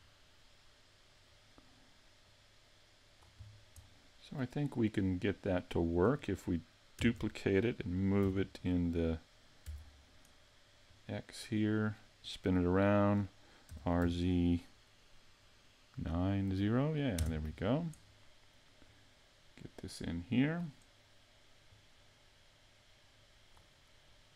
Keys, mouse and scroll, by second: 0.4 middle click, 2.2 click, 3.5 scroll down 1, 3.8 middle click, 5.3 scroll up 1, 7.0 shift+d, 10.8 click, 13.7 r, 18.9 click, 21.7 click.